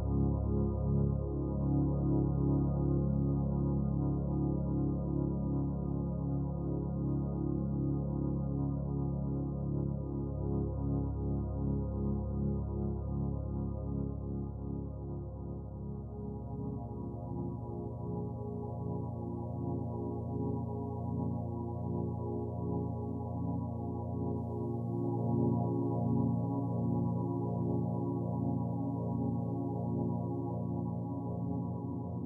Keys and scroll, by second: 3.1 ctrl+j, 3.5 ctrl+t, 13.5 ctrl+j, 13.8 ctrl+t.